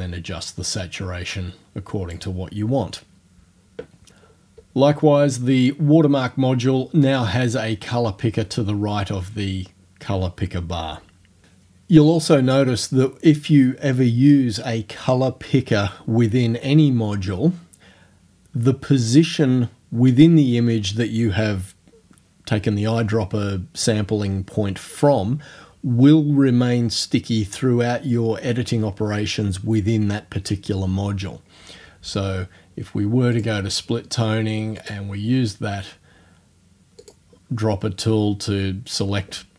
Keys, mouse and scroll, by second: 33.4 click, 34.8 click, 35.1-37.0 middle drag, 37.0 click.